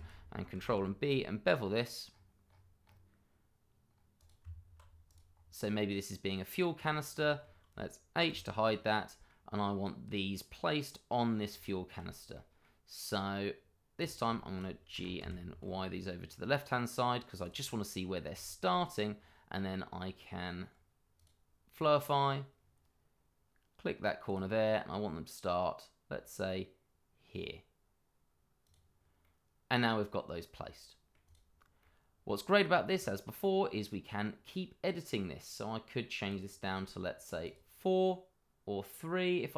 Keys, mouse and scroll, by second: 0.5 ctrl+b, 2.0-2.5 scroll up 1, 4.1 click, 4.4 Tab, 5.0 click, 5.4 scroll down 1, 5.7 middle click, 6.7 click, 7.2 middle click, 8.3 h, 9.0 middle click, 11.6 shift+middle click, 11.7 middle click, 11.7 shift+middle click, 12.3 middle click, 14.0 click, 14.3 shift+middle click, 14.4 middle click, 14.9 g, 15.2 y, 17.4 click, 18.0-18.3 scroll up 1, 18.4 shift+middle click, 19.4 scroll down 1, 21.2 click, 24.2 click, 28.6 click, 29.2 middle click, 32.9 click, 34.5 middle click, 36.3 click.